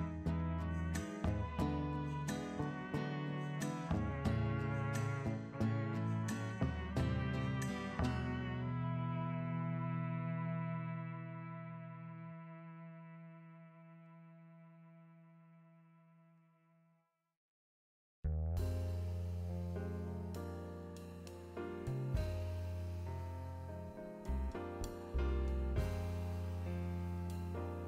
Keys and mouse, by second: 2.6-4.0 typing, 3.6 Escape, 4.8 click, 5.1 click, 6.4 click, 6.8-9.1 typing, 7.2 click, 9.0 click, 10.3 Return, 10.3-11.2 typing, 11.8 click, 12.9 click, 13.7 shift+d, 14.3 g, 16.6 click, 16.9 0, 17.1 click, 17.7 click, 17.8 0, 18.4 `, 18.6 g, 19.9 click, 19.9-21.2 typing, 21.4 Escape, 22.1 click, 22.2 0, 22.5 ctrl+z, 25.8 ctrl+z, 27.7 `.